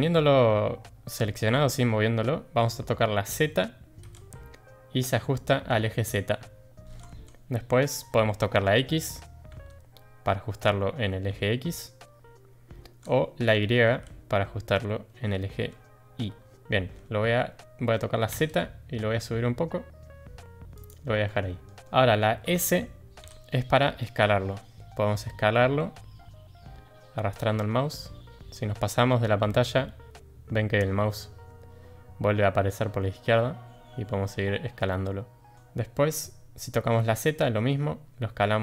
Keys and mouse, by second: 21.2-21.6 middle drag, 23.2 s.